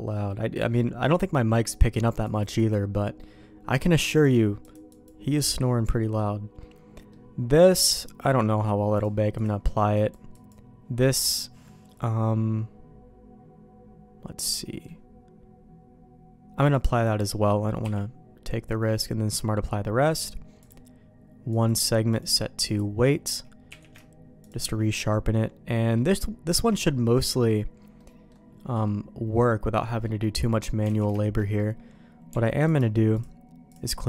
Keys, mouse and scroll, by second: 0.1 middle click, 2.3 click, 2.6 click, 3.2 middle click, 4.7 click, 5.6 middle click, 6.6 middle click, 9.0 click, 10.0 click, 10.4 click, 10.9 middle click, 11.9-14.9 middle drag, 16.7 click, 17.8 q, 20.7 click, 21.5 click, 22.2 click, 23.7 q, 24.9 middle click, 25.7 middle click, 26.5 Tab, 27.1 middle click, 28.0 middle click, 28.8-30.0 middle drag, 30.9 alt+a, 31.2 middle click, 33.1 click.